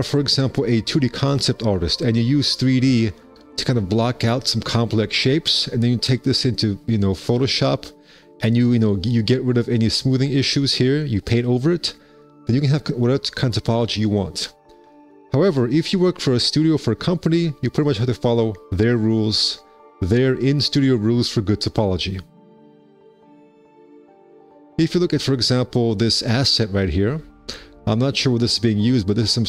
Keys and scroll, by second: 6.9 F4, 15.9 F4.